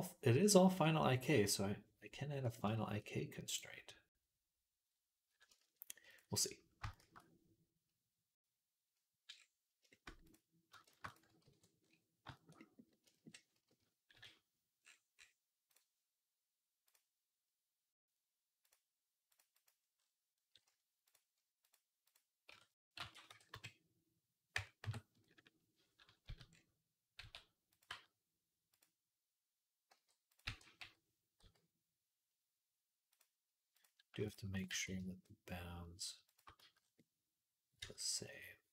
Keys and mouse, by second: 3.3 click, 3.4-6.0 middle drag, 6.0 click, 6.6-12.3 shift+middle drag, 6.8 shift+a, 10.7 shift+d, 11.3 alt+g, 12.3-14.4 drag, 14.0 KP_Decimal, 14.4-15.5 middle drag, 15.5-19.2 drag, 19.2 middle click, 19.4 click, 19.5-20.9 middle drag, 20.9 click, 21.6 middle click, 21.9 click, 22.0-33.4 middle drag, 22.3 Tab, 22.7 a, 22.8 r, 25.2 KP_1, 26.1 z, 27.0 s, 27.7 g, 29.7 g, 30.3 e, 33.6 click, 34.5 g, 36.4 z, 37.6 Tab.